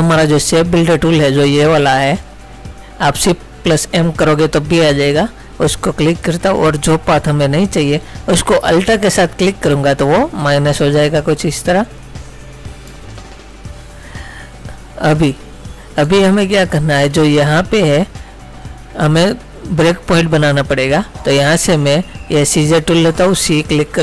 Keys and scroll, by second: 16.2 space.